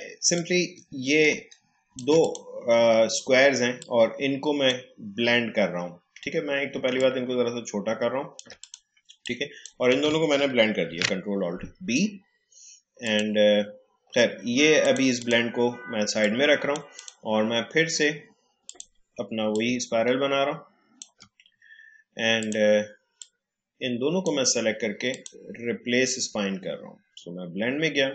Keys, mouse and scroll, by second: 0.3-10.8 alt+drag, 10.8 ctrl+alt+b, 13.0-25.1 drag.